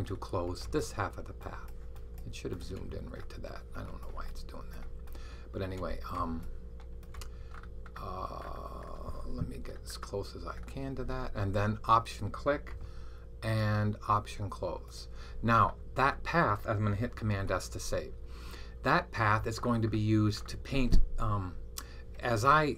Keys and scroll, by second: 17.2 super+s.